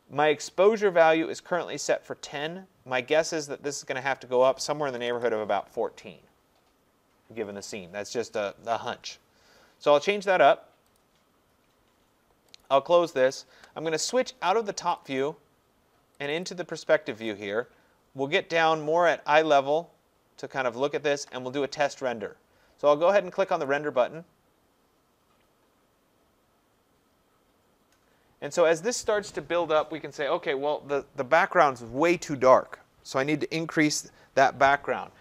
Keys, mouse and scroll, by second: 4.5 click, 4.7-5.6 typing, 11.0 click, 12.6 click, 13.3 click, 15.1 click, 15.2 click, 16.3 click, 16.5 click, 16.9 middle click, 17.0 middle click, 19.1 right click, 19.9 middle click, 23.7 click.